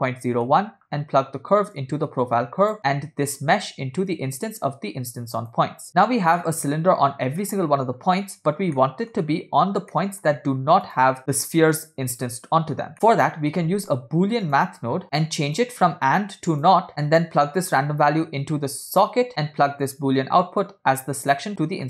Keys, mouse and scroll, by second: 1.8-2.8 drag, 2.8 middle click, 4.1-5.6 drag, 6.0 scroll down 3, 6.4-8.1 middle drag, 8.5 scroll down 2, 8.8 middle click, 9.3 scroll up 2, 9.7 scroll down 2, 10.0 middle click, 10.9 click, 11.2 middle click, 12.9 middle click, 12.9 scroll up 3, 13.8 shift+a, 15.0 middle click, 15.0 scroll down 2, 15.5-16.8 drag, 16.9 middle click, 17.7-19.1 drag, 19.9-21.4 drag.